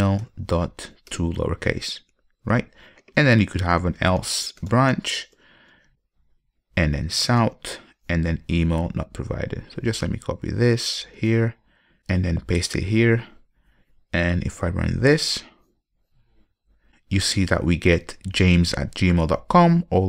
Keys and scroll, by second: 6.1 Return, 11.5 super+c, 12.9 super+v, 15.2 ctrl+F5.